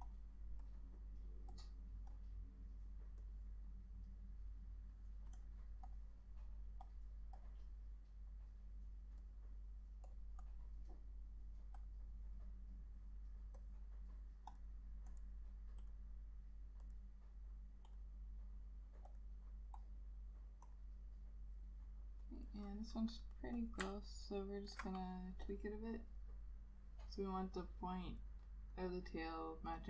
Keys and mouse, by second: 10.6 double click, 22.5 double click, 24.2 alt+click.